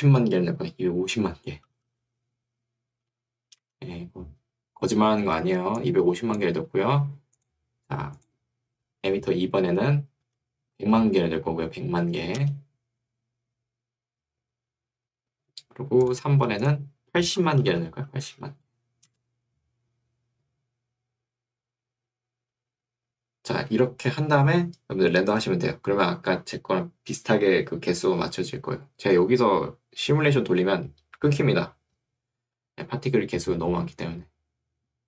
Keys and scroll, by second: 3.7 Return, 6.5 Escape, 10.3 1, 10.7 0, 12.5 Return, 17.7 0, 19.1 Return.